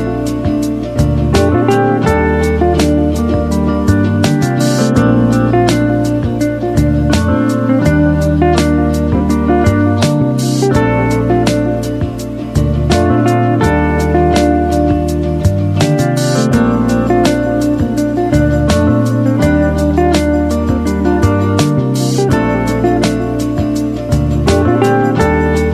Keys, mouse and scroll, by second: 3.6 click, 6.5 click, 13.3-14.9 typing, 15.4 click, 18.7-22.9 drag.